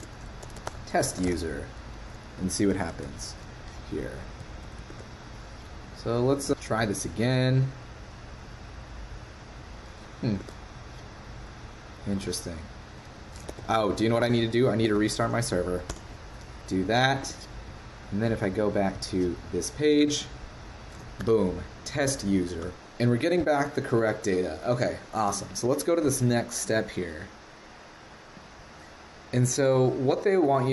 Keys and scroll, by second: 3.3 super+s, 4.9 super+Tab, 10.4 super+Tab, 12.1 super+Tab, 13.5 super+Tab, 13.6 super+Tab, 14.9 ctrl+c, 17.2 super+Tab.